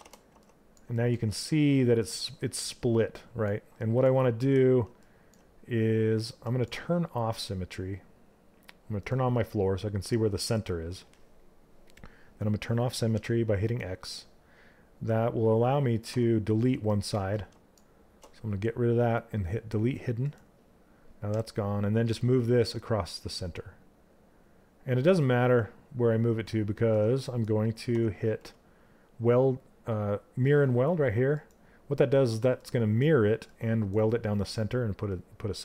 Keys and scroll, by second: 3.9 w.